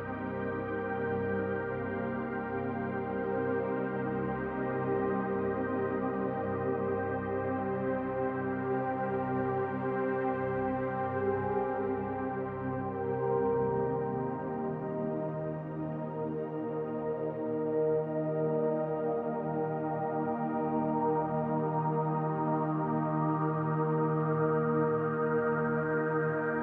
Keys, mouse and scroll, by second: 2.8 middle click, 3.6 Tab, 4.2 middle click, 5.9 Tab, 7.4 click, 7.9 l, 8.7 click, 10.3 click, 13.3 click, 14.0 click, 14.4 l, 15.2 click, 16.7 click, 17.1 l, 17.7 click, 18.4 middle click, 19.4 click, 19.6 l, 20.2 click, 21.0 middle click, 22.4 click, 22.7 l, 23.5 click, 24.6 middle click, 25.4 click, 26.2 middle click.